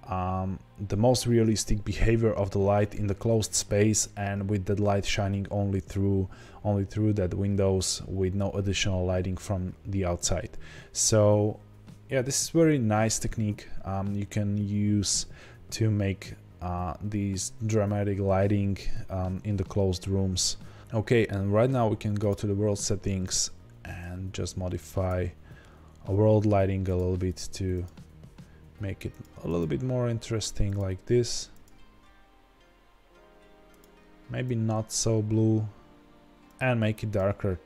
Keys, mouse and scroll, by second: 10.5-12.2 scroll down 2, 12.2-12.7 scroll down 1, 12.7-16.8 scroll up 1, 20.8 click, 22.1 click, 23.2 click.